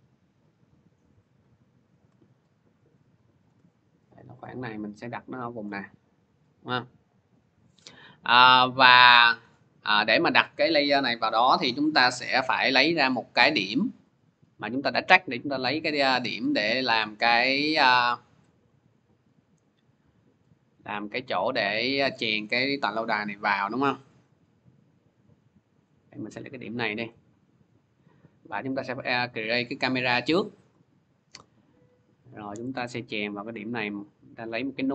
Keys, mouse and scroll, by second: 0.3 scroll, 3.2 shift+click, 5.4 click, 5.7 scroll, 6.4-7.3 scroll, 7.3-8.3 shift+scroll, 9.3 click, 9.9 click, 13.2 click, 14.0 click, 14.6 middle click, 15.0 scroll, 18.8 click, 23.7 click, 24.6 click, 25.1 click, 26.5 click, 26.9 right click, 28.5 click, 29.5 click, 32.0 click, 32.6 right click, 33.9 click.